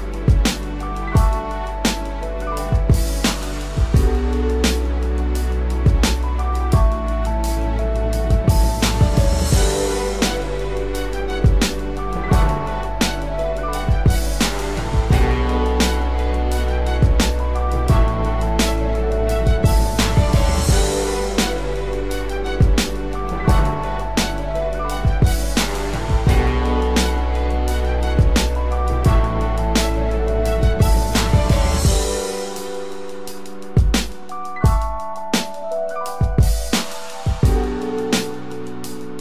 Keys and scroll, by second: 1.6 ctrl+t, 3.0 ctrl+j, 3.7 ctrl+t, 5.5 ctrl+j, 8.4 ctrl+t, 12.2 ctrl+e.